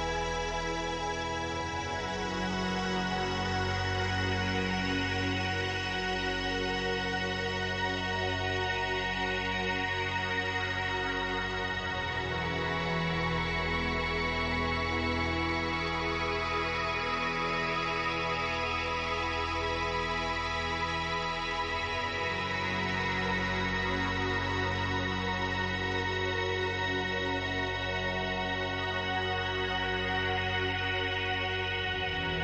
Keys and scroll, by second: 1.4 ctrl+d, 5.9 space, 7.0 space.